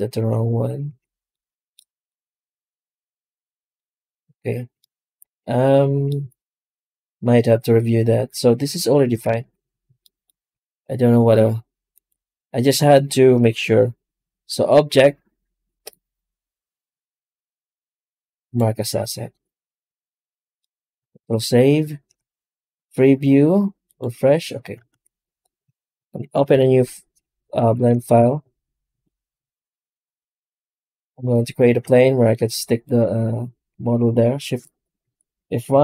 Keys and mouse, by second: 0.0 Tab, 0.7 a, 1.2 middle click, 3.0 alt+middle click, 4.6-8.9 middle drag, 9.1 ctrl+space, 27.3 right click, 27.4 x, 28.0 shift+a, 31.7 s, 32.3 s, 34.9 shift+F1, 35.6 shift+F1.